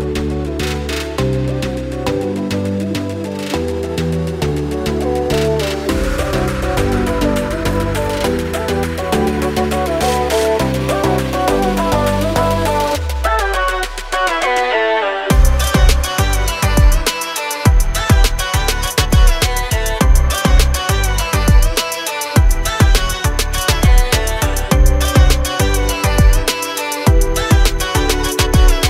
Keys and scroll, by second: 0.4 Up, 0.9 space, 1.4 Delete, 6.1 p, 7.1 space, 7.3 Escape, 8.1 r, 10.0 space, 10.3 p, 12.0 space, 16.2 r, 17.3 Escape, 18.2 Escape, 24.8 space, 26.1 Delete, 27.5-28.8 typing.